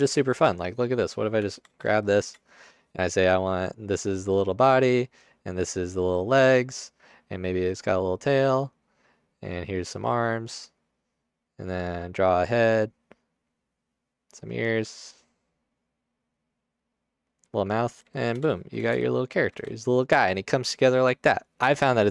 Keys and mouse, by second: 1.6 Tab, 3.9 click, 5.3 click, 8.5 click, 9.6 click, 10.5 click, 14.1 click, 15.6 middle click, 16.3 click, 18.2 alt+shift+middle click, 19.5 alt+shift+middle click.